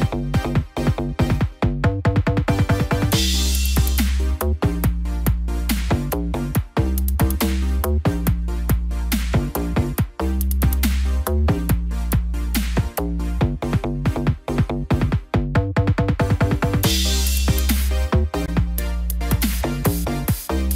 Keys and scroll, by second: 13.5 ctrl+-, 14.2 ctrl+0.